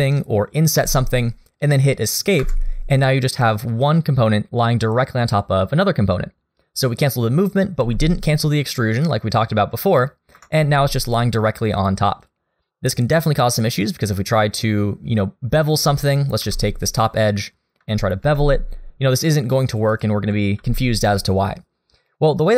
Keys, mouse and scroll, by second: 0.8 e, 7.8 g, 11.8 click, 12.2 click, 16.4 2, 16.9 click, 18.2 ctrl+b, 20.6 ctrl+z.